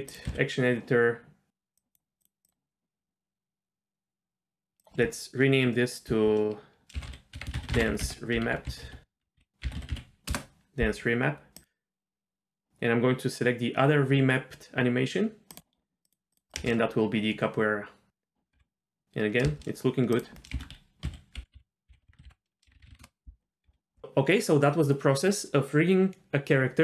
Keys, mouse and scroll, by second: 0.1 click, 1.7 click, 4.8-10.3 drag, 7.4 BackSpace, 11.6-13.6 drag, 16.0 drag, 17.7 click, 17.7 space, 18.5 z, 19.4 space, 20.1-23.0 drag, 23.6 z.